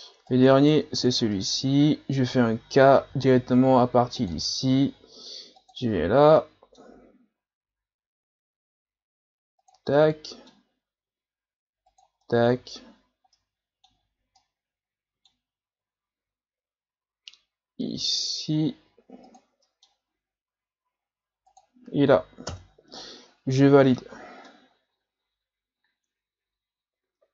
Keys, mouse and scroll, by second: 0.3 right click, 1.0 ctrl+z, 1.4-3.1 middle drag, 3.1 k, 5.9-6.4 scroll down 1, 6.4-9.4 middle drag, 9.9-17.4 middle drag, 19.6 middle click, 20.1-21.3 scroll up 3, 23.0-24.2 middle drag, 24.2 scroll down 3, 24.5-27.3 middle drag.